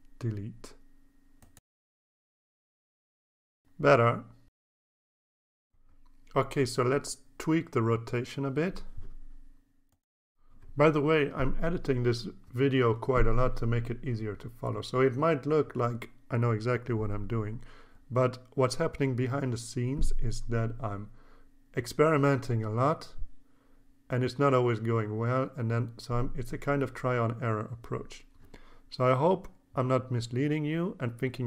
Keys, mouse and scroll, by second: 2.0-6.8 drag, 7.1 click, 7.6-9.5 drag, 10.7-22.1 drag, 23.5 click, 26.3 click, 26.6 scroll up 2, 26.9 scroll down 1, 27.5 click, 28.1-28.5 scroll up 6, 28.5 scroll down 2, 28.7-29.6 scroll up 12, 30.1-31.4 drag.